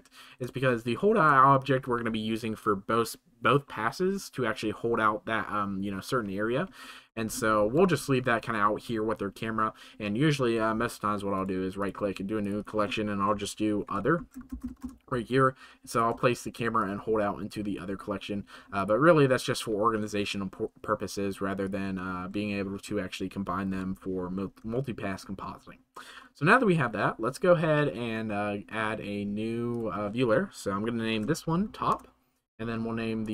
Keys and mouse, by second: 0.6-1.2 shift+middle drag, 7.0 shift+middle click, 11.3 middle click, 12.5-14.8 middle drag, 16.2 shift+click, 16.9 click, 18.7 click, 24.6 shift+middle click, 29.6-31.9 right drag, 33.2-33.3 right drag.